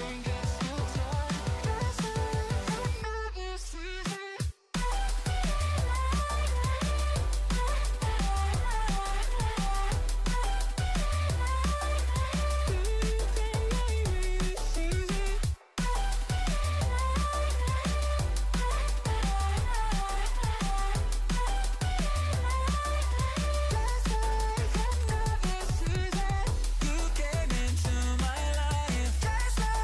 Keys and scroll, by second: 7.4 ctrl+-, 7.7 ctrl+0, 8.0 ctrl+=, 11.2 ctrl+z, 12.3 ctrl+shift+z, 12.9 ctrl+z, 19.0 ctrl+z, 21.6 ctrl+shift+z, 23.5 ctrl+z, 24.6 ctrl+shift+z, 25.1 ctrl+=.